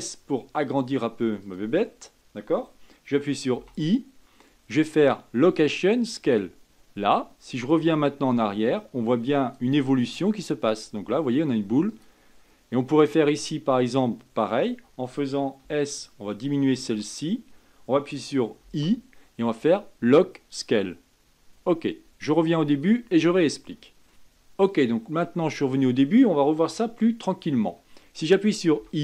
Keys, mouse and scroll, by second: 0.1 s, 8.2-15.9 drag, 15.9 s, 18.9 i, 23.0-24.1 drag.